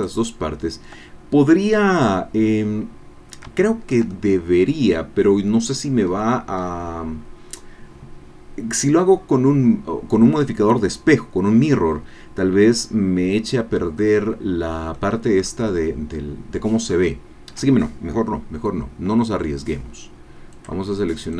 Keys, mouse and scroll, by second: 0.2 shift+click, 3.3-3.6 scroll down 3, 3.6 shift+click, 4.4-6.6 shift+drag, 6.6-7.1 scroll up 2, 7.2-7.6 scroll down 1, 12.7 scroll down 1, 14.0-15.1 drag, 15.4 scroll up 1, 20.5 click.